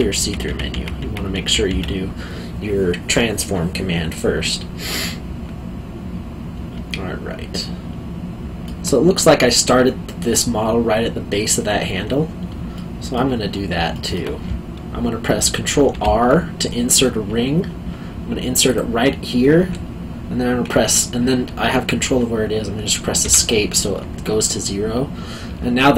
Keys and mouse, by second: 6.9 alt+middle click, 12.7 alt+middle click, 13.9 alt+middle click, 15.9 ctrl+r, 18.6 click, 23.2 Escape, 25.8 middle click.